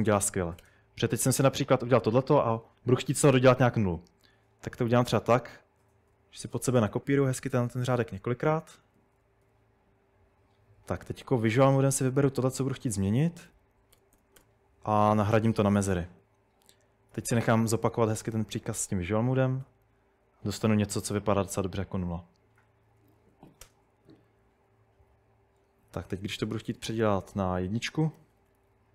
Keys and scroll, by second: 0.0-1.0 typing, 4.9-6.8 typing, 8.1-9.5 typing, 11.3-12.5 typing, 13.5-14.4 typing, 16.2 Escape, 16.8-19.6 typing, 20.7 typing, 22.6-24.6 typing, 25.8-28.9 typing.